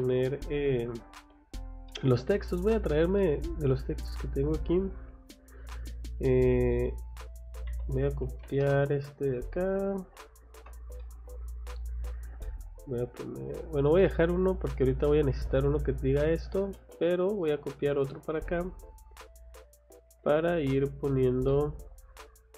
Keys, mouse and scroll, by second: 1.9 middle click, 3.2 middle click, 3.7 scroll up 1, 4.5 click, 4.7 click, 6.5 scroll down 2, 7.7 c, 8.2 o, 8.9 click, 9.2 scroll down 2, 10.5 F8, 11.0 middle click, 11.8 scroll up 2, 12.4 middle click, 14.0 middle click, 14.9 click, 15.4 Escape, 16.4 click, 16.6 click, 16.9 click, 18.1 click, 18.3 Escape, 18.8 click, 19.0 click, 20.1 Escape, 20.6 click, 21.1 click, 21.8 middle click.